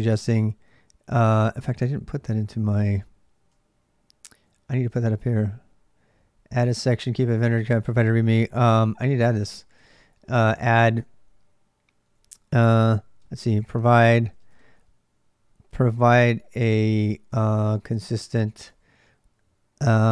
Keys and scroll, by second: 0.4-14.7 typing, 17.2-19.6 typing.